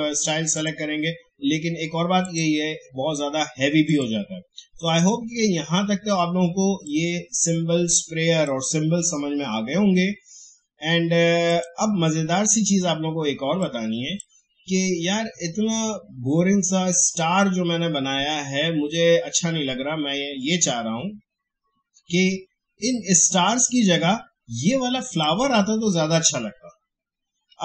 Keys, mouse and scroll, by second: 6.8-11.0 drag, 11.5-16.6 drag, 25.1 click.